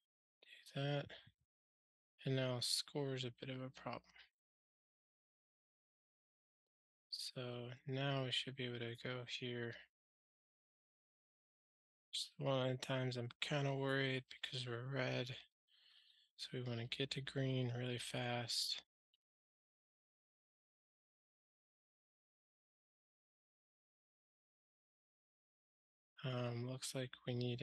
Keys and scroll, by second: 10.5 ctrl+g, 14.4 super+BackSpace, 20.4 ctrl+alt+shift+r.